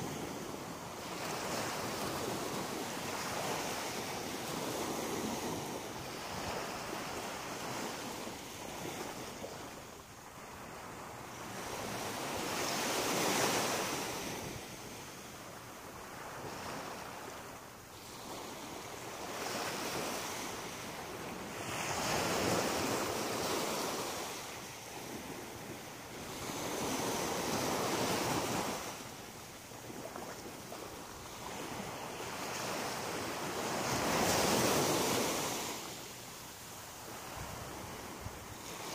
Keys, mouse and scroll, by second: 0.4 right click, 0.9 middle click, 2.3 e, 3.7 click, 4.9 click, 5.7 right click, 6.0 shift+right click, 6.9 right click, 7.2 shift+right click, 8.1 m, 9.0 middle click, 9.9 shift+middle click, 11.2 middle click, 11.6 middle click, 12.4 right click, 13.1 middle click, 15.9 shift+right click, 16.3 shift+right click, 16.8 right click, 17.2 shift+right click, 17.6 shift+right click, 18.4 right click, 19.4 g, 20.3 click, 21.4 right click, 21.9 shift+right click, 22.4 right click, 22.9 right click, 23.9 f, 24.7 right click, 25.4 shift+right click, 26.3 right click, 26.6 shift+right click, 27.6 f, 28.4 right click, 28.9 shift+right click, 29.6 right click, 29.9 shift+right click, 30.8 f, 31.7 right click, 32.2 shift+right click, 33.1 right click, 33.4 shift+right click, 33.8 middle click, 35.8 f, 36.2 middle click.